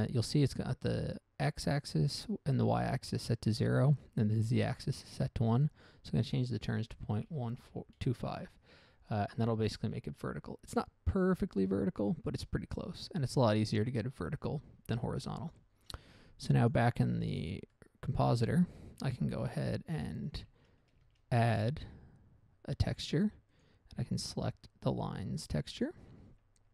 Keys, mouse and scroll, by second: 0.3 click, 5.9 click, 7.6-8.0 typing, 8.5 Return, 9.5 scroll down 1, 9.8 middle click, 15.6 click, 15.8 click, 16.9 click, 17.4-17.8 scroll down 1, 17.8 middle click, 18.0 middle click, 18.5 scroll up 1, 19.1 scroll down 1, 19.4 shift+a, 20.3 middle click, 20.6 middle click, 21.1 shift+a, 23.5 click, 23.8 click, 23.9 double click, 24.4 double click, 26.1 click, 26.5 scroll down 1.